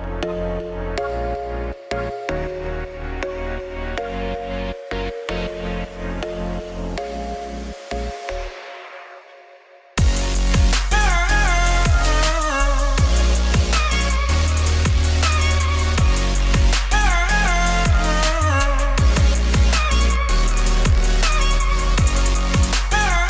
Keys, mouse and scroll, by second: 0.1-0.5 scroll up 1, 0.5-1.0 scroll down 1, 1.2-2.2 drag, 2.2 ctrl+z, 4.8-7.9 drag, 9.4 click, 10.0 click, 11.1-12.3 drag, 12.3 z, 15.2 scroll up 4, 15.6 click, 16.1 click, 16.9-18.1 drag, 18.3-19.5 drag, 19.9 click, 20.7 ctrl+s, 21.4 click, 21.9 click.